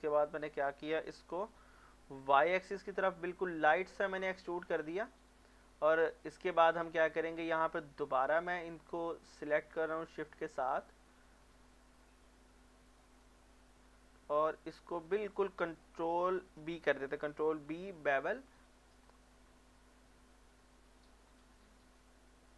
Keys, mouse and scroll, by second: 1.1 x, 2.2 y, 5.1 click, 5.3 middle click, 6.4 shift+middle click, 6.7 scroll up 1, 8.6 alt+click, 11.1 scroll down 1, 11.4 middle click, 12.9 alt+shift+click, 13.3 middle click, 13.9 scroll up 1, 14.5 middle click, 14.9 scroll up 1, 15.8 middle click, 16.2 shift+middle click, 17.6 ctrl+b, 19.0-19.5 scroll up 1.